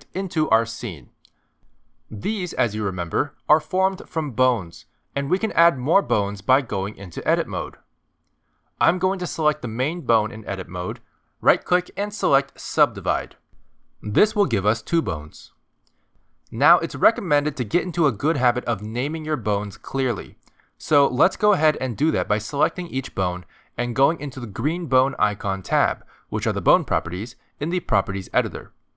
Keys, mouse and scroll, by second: 0.1 Delete, 1.2 click, 6.4 click, 11.5 right click, 15.5 click, 16.2 click, 17.0 click, 17.6-19.9 scroll up 2, 19.9 click, 25.6 click.